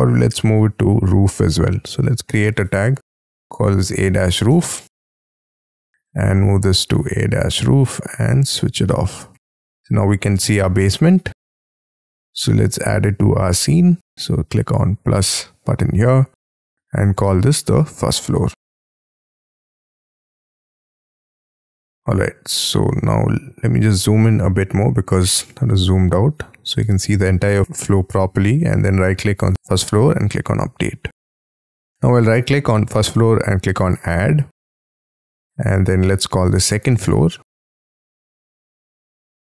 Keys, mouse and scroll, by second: 2.6-4.8 typing, 16.9 double click, 17.1 double click, 17.4 double click, 17.8 ctrl+a, 17.9-19.2 typing, 20.5 Escape, 20.7 Escape, 23.0 scroll up 2, 25.0-26.2 scroll up 1, 26.2-28.6 scroll down 1, 28.6-31.5 scroll down 1, 31.5 right click, 36.3-38.8 typing.